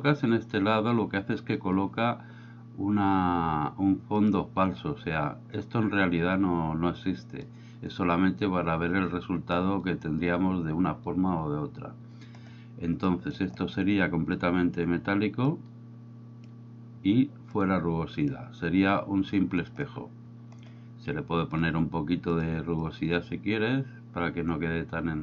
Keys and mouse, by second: 4.3-11.5 drag, 13.2 middle click, 14.5 drag, 15.6-16.6 drag, 17.5-18.4 drag, 21.6-22.5 drag, 22.9-25.2 drag.